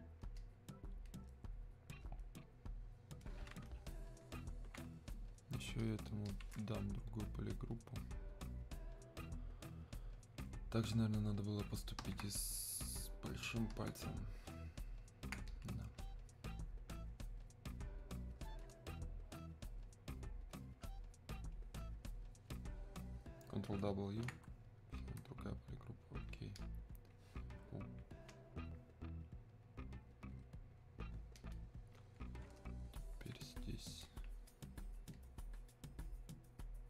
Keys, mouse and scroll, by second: 15.5-36.8 drag.